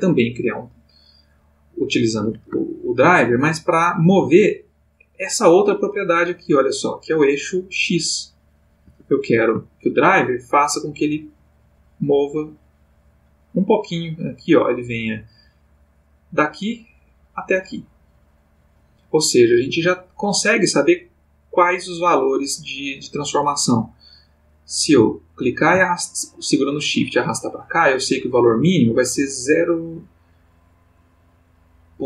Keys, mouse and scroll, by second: 0.5 click, 2.7-3.4 shift+middle drag, 4.1 click, 6.3-9.4 drag, 8.8 Escape, 9.9-20.0 shift+drag, 19.6 Escape, 25.3-32.0 drag.